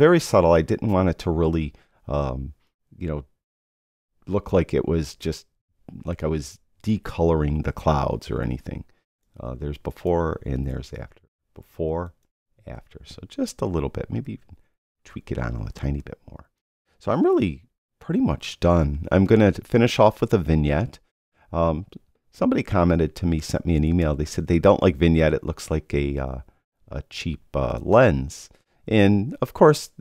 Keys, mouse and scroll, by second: 14.2 click.